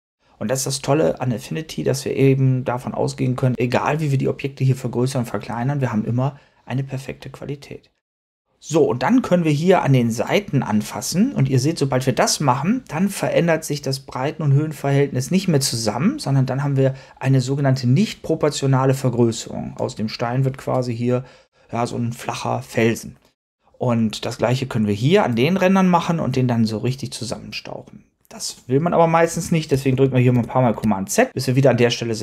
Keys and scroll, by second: 29.8 super+z.